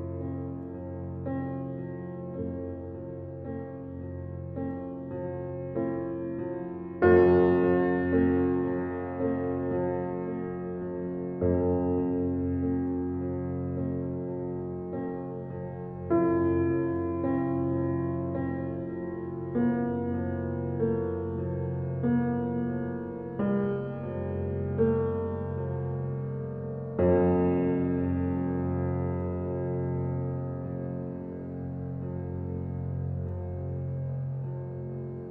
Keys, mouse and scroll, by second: 7.8 space, 8.4 space, 8.7 ctrl+alt+scroll up 1, 9.6 alt+click, 11.5-12.8 alt+right drag, 12.9 alt+click, 13.7 click, 24.2 alt+click, 24.9 click, 32.6 alt+click.